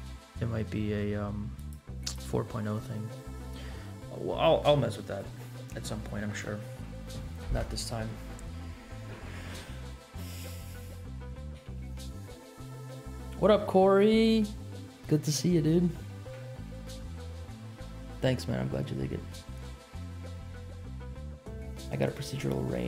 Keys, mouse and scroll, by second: 1.5 click, 2.0 click, 2.5-4.0 scroll up 12, 10.2 middle click, 11.5 g.